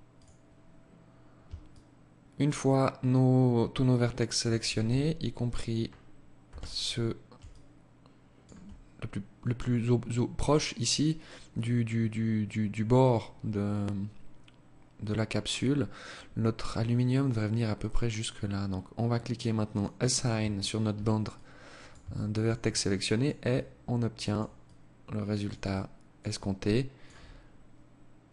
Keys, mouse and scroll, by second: 0.2-0.8 scroll down 1, 0.8 alt+click, 0.8 scroll down 1, 4.0 z, 5.6 z, 6.6 alt+click, 18.8 click, 19.6 Tab, 20.4 alt+click, 21.2 alt+shift+click, 21.8 alt+click, 22.6 alt+click, 23.8 alt+click, 24.8 alt+click, 25.5 alt+click, 28.2 alt+click.